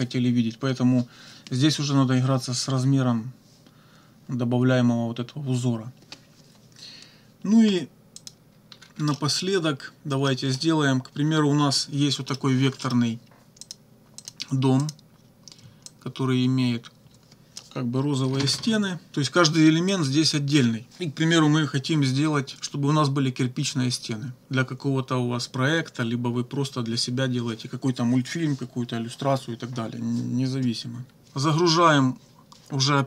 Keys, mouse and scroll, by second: 8.2 click, 8.7 -, 9.1 click, 10.3 click, 12.3 click, 12.8 click, 13.6 click, 14.2 click, 14.8 click, 15.9-17.8 drag, 18.3 ctrl+z, 19.9 click, 31.0 -.